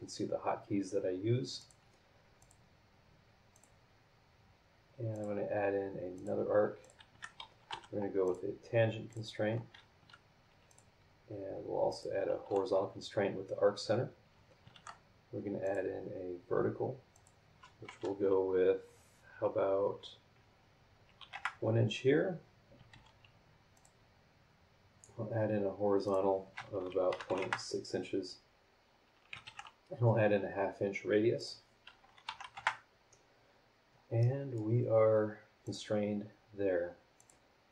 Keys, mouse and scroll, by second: 1.6 click, 2.4 click, 3.5 click, 5.1 click, 6.1 click, 6.8 click, 7.1 Escape, 8.2 click, 8.2 t, 9.1 click, 10.0 Escape, 10.7 click, 11.9 click, 12.4 h, 14.7 shift+v, 15.6 click, 17.1 click, 21.2 KP_1, 21.3 KP_Enter, 22.9 shift+g, 23.7 click, 26.0 click, 27.1 KP_Decimal, 27.2 KP_6, 27.4 KP_Enter, 28.2-28.6 scroll down 2, 28.8 scroll up 2, 29.4 shift+r, 31.3 click, 32.2 KP_Decimal, 32.4 KP_5, 32.5 KP_Enter, 33.7 scroll down 2, 34.2 click, 35.6 click, 37.2 click.